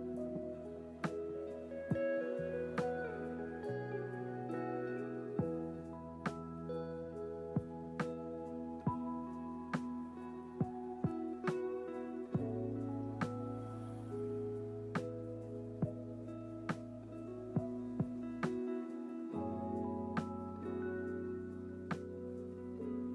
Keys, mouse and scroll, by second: 0.2 click, 0.2 scroll down 1, 0.8 click, 5.7 click, 6.5 click, 10.2-12.2 drag, 12.9 ctrl+z, 14.8-15.3 scroll down 1, 16.6-22.9 drag, 16.6-17.2 scroll down 1.